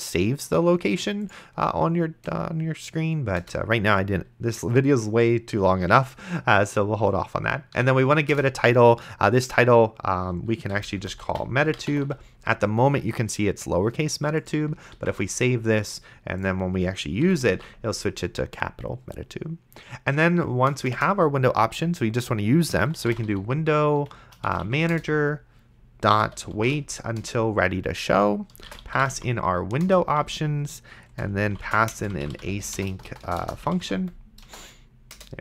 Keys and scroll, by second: 3.7 Return, 8.0 t, 8.3 Return, 10.5-12.6 typing, 15.2 ctrl+s, 17.2 ,, 17.7 ctrl+s, 20.8 Return, 22.6-24.6 typing, 24.9 Return, 26.0-27.2 typing, 27.2 Return, 28.6-34.5 typing, 29.9 Return, 35.1 Return.